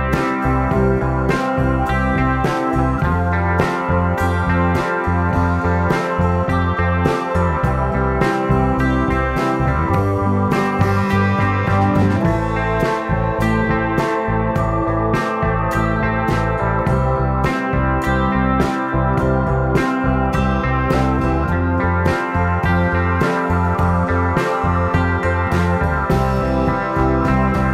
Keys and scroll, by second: 12.9 space, 27.2 super+z, 27.4 super+z.